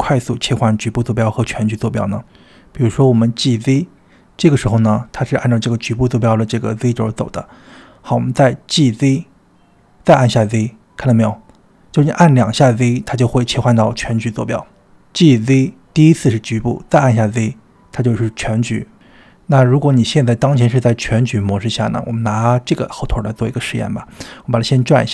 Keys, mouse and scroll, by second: 0.5 click, 0.5 g, 3.3 g, 12.1-13.7 middle drag, 14.9 g, 19.9 click, 20.4-22.0 drag, 23.7 click.